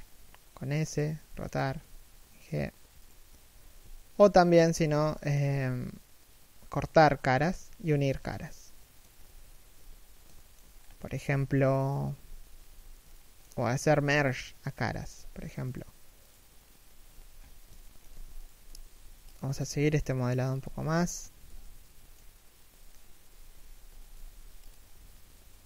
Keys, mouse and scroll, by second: 3.2 a, 3.6 alt+shift+middle click, 4.4 alt+right click, 4.8 alt+shift+middle click, 7.3 a, 8.2 middle click, 8.9 KP_3, 9.4 KP_1, 10.0 alt+shift+middle click, 10.3 scroll up 1, 11.9 z, 12.8 shift+middle click, 13.6 z, 15.3 right click, 17.0-17.4 scroll down 1, 17.4 alt+shift+middle click, 18.1 alt+right click, 18.3 z, 20.8-21.1 scroll up 1, 21.1 z, 21.3 middle click, 22.9 3, 23.3 2, 23.5 1, 23.8 z.